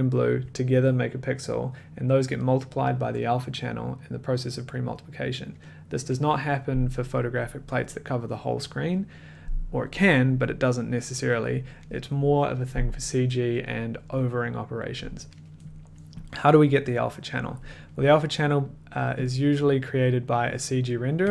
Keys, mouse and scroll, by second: 18.6 click, 19.2 click, 20.5 click, 21.2 click, 21.2 1.